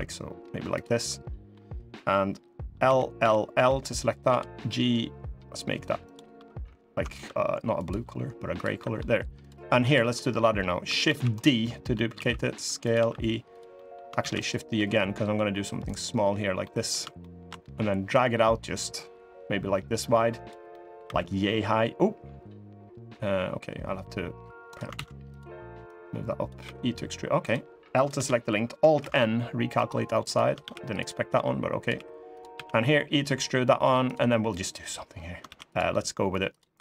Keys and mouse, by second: 0.7 click, 2.6 l, 2.9 l, 3.3 l, 4.0 g, 6.9 g, 8.5 middle click, 9.5 click, 9.9 middle click, 10.8 shift+d, 11.3 middle click, 11.9 s, 12.7 e, 13.5 middle click, 13.9 shift+d, 16.4 middle click, 16.4 s, 16.9 shift+middle click, 17.8-20.2 drag, 20.4 middle click, 20.8 e, 24.7 ctrl+z, 25.6 click, 26.4 e, 27.7 click, 27.9 l, 28.7 alt+n, 30.0 click, 30.3 ctrl+r, 31.7 3, 32.1 click, 32.3 e, 35.2 ctrl+r, 36.5 3.